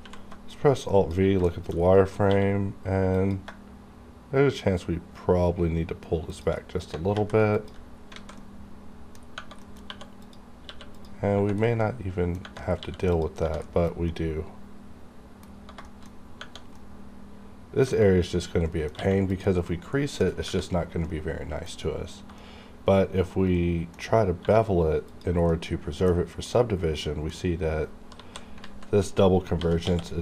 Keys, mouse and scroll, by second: 0.0 v, 0.5 click, 1.5 shift+middle click, 1.7 shift+scroll up 2, 2.3 q, 3.1 click, 6.3 shift+click, 6.6-7.1 shift+scroll down 2, 7.1 alt+v, 7.5 click, 7.6 click, 7.8 scroll down 1, 8.1 alt+a, 8.4 alt+middle click, 9.2 scroll up 1, 9.6 middle click, 9.6 middle click, 9.9 2, 10.1 click, 10.6 q, 10.9 click, 11.6 scroll down 1, 11.6 middle click, 12.7 scroll up 1, 12.8 q, 13.0 click, 13.6 shift+middle click, 14.0 scroll up 1, 14.1-15.6 middle drag, 15.8 shift+middle click, 16.8 middle click, 18.3-18.7 scroll up 1, 18.7 middle click, 19.0 q, 19.3 click, 19.7 middle click, 20.3 scroll down 1, 21.0 middle click, 21.8-22.1 scroll up 1, 22.4-24.1 middle drag, 24.1 scroll up 1, 24.4 1, 25.1 click, 25.1 click, 25.5 middle click, 26.2-26.5 scroll up 1, 26.5 middle click, 27.5-27.8 scroll up 1, 28.1 KP_7, 28.6 z, 29.0-29.5 scroll up 1, 29.5 g, 29.9 x.